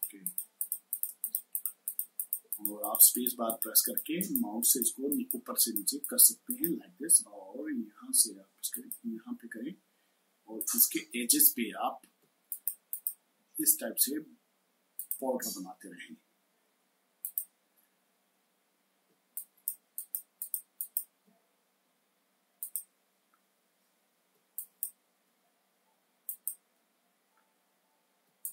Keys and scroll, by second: 12.1 space, 18.9 space, 24.1 space, 28.1 space.